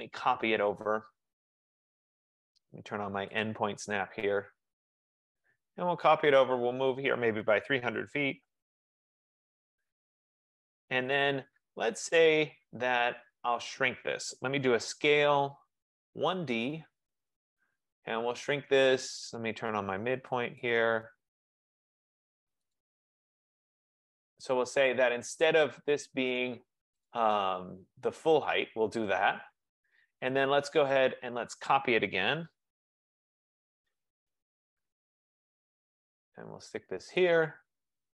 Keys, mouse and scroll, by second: 0.0-0.6 typing, 1.6 typing, 3.4-4.1 typing, 3.5 click, 5.3 click, 7.6-9.3 typing, 11.2 Escape, 11.8 typing, 12.2-14.5 drag, 14.5-17.0 typing, 16.3 click, 20.8 click, 22.9 click, 24.4 click, 27.3 click, 30.1-32.2 drag, 32.4-33.5 typing, 34.7 typing, 35.9 click, 37.3 click.